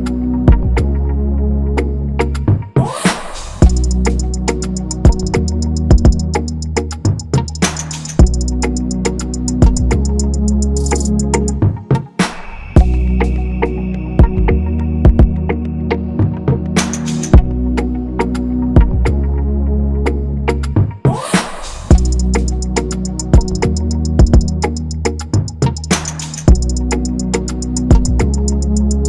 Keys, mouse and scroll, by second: 8.8 ctrl+f, 15.6 ctrl+=, 15.7 ctrl+=, 16.4 double click, 19.6 ctrl+z, 21.9 double click, 23.7 Return, 25.6 Left, 25.7 Return, 26.1 ctrl+a.